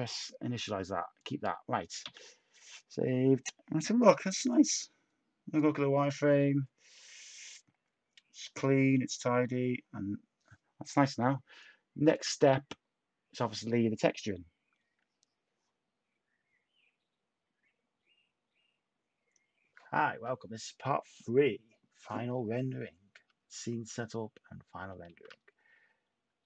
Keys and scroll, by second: 2.0 s, 25.0 a.